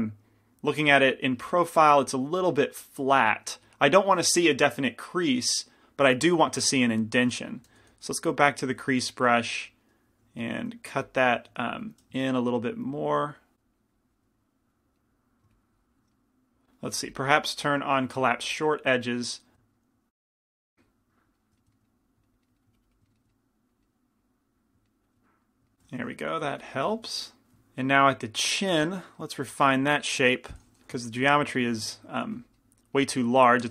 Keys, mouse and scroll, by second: 8.1 shift+c, 8.1 shift+f, 9.1 f, 10.8 shift+f, 11.7 f, 15.1 middle click, 15.4-16.8 middle drag, 18.8-20.2 middle drag, 19.2-21.4 drag, 20.7 f, 21.7 middle click, 22.9 click, 22.9-26.6 middle drag, 26.6 g, 26.6 f, 29.0 middle click, 29.3 middle click, 29.9-32.4 typing, 32.8-33.7 middle drag.